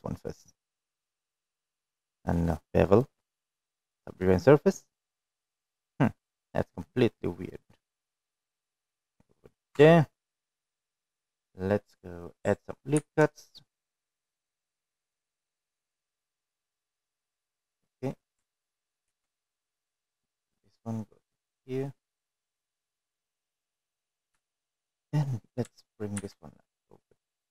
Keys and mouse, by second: 5.1-7.0 drag, 7.6-8.1 middle drag, 11.2 middle click, 12.0 Tab, 12.2 middle click, 13.4 middle click, 15.0 ctrl+r, 19.7 middle click, 21.2 ctrl+r, 26.0 middle click, 26.6 shift+middle click, 26.8 middle click.